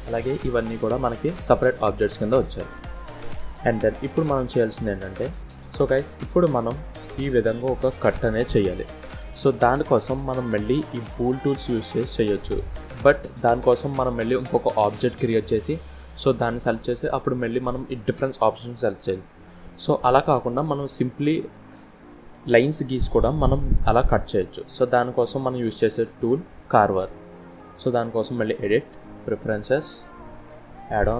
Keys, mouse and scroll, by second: 0.8-1.2 scroll down 2, 1.3 scroll up 2, 1.7 scroll down 1, 2.7 KP_1, 3.4 scroll up 2, 4.2 click, 5.2 click, 5.5 click, 5.7 click, 9.3 click, 11.3 click, 26.7 click.